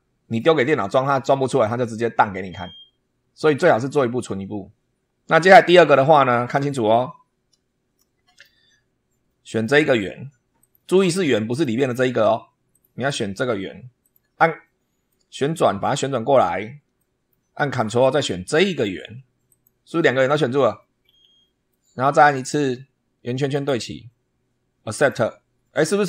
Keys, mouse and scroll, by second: 7.9-8.5 shift+middle drag, 8.7-9.3 shift+scroll up 2, 10.5 click, 11.4 click, 12.6 click, 13.9 click, 15.0-16.5 middle drag, 16.9-17.4 shift+middle drag, 19.4 ctrl+click, 20.9-21.3 scroll down 2, 21.6 middle click, 23.4 click, 24.9 click.